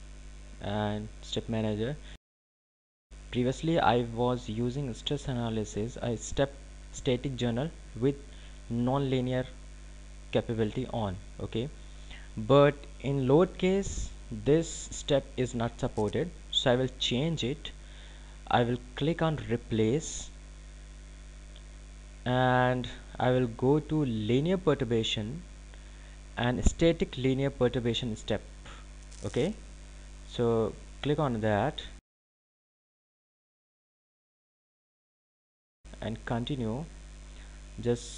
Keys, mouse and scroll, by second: 0.4 click, 23.1 click, 34.5 click.